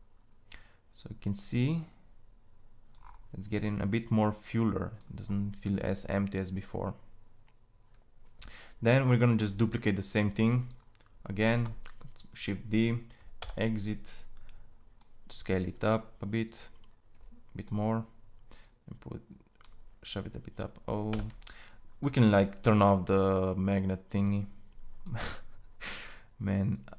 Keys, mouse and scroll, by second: 2.6-7.4 middle drag, 11.0 shift+d, 15.0 s, 16.6 s, 24.4-26.9 drag.